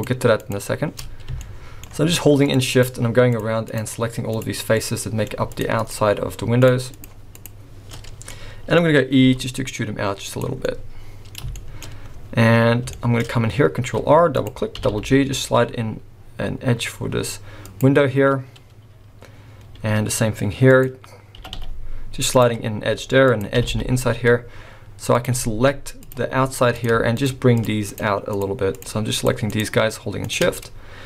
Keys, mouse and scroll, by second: 0.4 shift+click, 1.4 shift+middle click, 2.4 shift+click, 2.7 shift+click, 3.3 shift+click, 3.7 shift+click, 4.3 shift+click, 4.7 shift+middle click, 4.7 shift+scroll up 1, 5.5 shift+click, 5.8 shift+click, 6.6 shift+click, 7.0 shift+click, 7.4 shift+click, 8.0-8.4 scroll down 3, 8.3 middle click, 8.8 scroll up 1, 9.2 e, 10.7 middle click, 11.5 shift+middle click, 11.9-12.3 scroll up 1, 12.6 scroll up 1, 12.9 shift+middle click, 13.3 scroll up 1, 13.8 ctrl+r, 18.4-19.0 scroll down 3, 19.0-19.6 scroll up 2, 19.8 ctrl+r, 22.7 ctrl+r, 26.1 click, 26.7 click, 27.1 shift+click, 27.5 shift+click, 27.9 shift+click, 28.3 shift+click, 28.7 click, 29.5 click, 30.2 shift+click, 30.6 middle click.